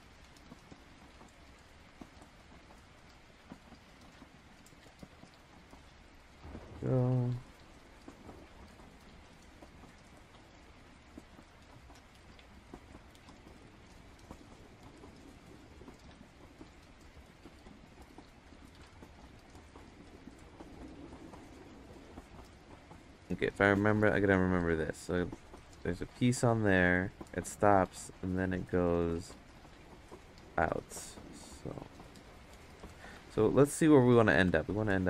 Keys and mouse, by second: 0.0-1.1 drag, 1.3 ctrl+z, 1.6 click, 2.6 ctrl+z, 3.0 click, 4.5 click, 6.9 click, 13.6-14.7 drag, 15.1 ctrl+z, 15.5-17.0 drag, 17.8 click, 19.1 click, 20.4 ctrl+z, 20.8 click, 21.8 ctrl+z, 22.1 ctrl+z, 22.4 ctrl+z, 23.7-25.8 drag, 27.9 ctrl+z, 31.6-32.9 drag, 33.1 ctrl+z, 33.7 click, 34.5 ctrl+z, 34.9 click.